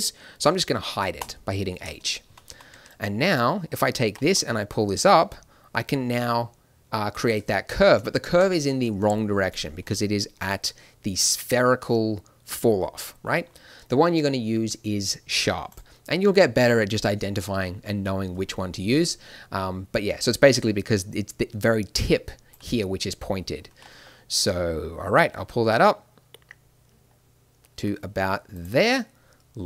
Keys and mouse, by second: 1.2 h, 2.2 a, 2.5 a, 2.7 b, 4.0 g, 10.4-12.1 drag, 21.9 d, 22.0-23.6 drag, 22.5 d, 23.6 g, 28.9 middle click, 29.6 middle click.